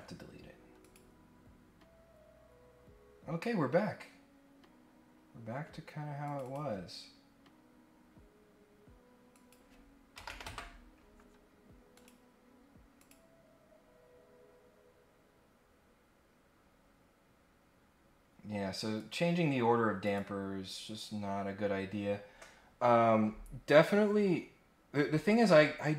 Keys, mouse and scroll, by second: 0.8 click, 5.3 scroll up 1, 6.2 click, 6.4 click, 9.3 click, 11.9 click, 12.9 click, 17.4-17.7 scroll up 1, 18.2 scroll up 1, 18.9 right click, 20.0 click.